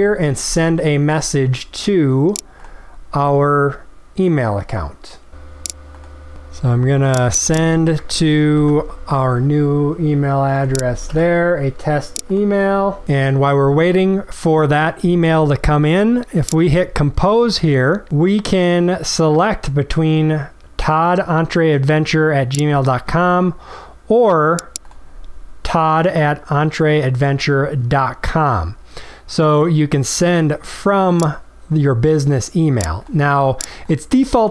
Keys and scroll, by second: 8.2 ctrl+c, 11.0 ctrl+v.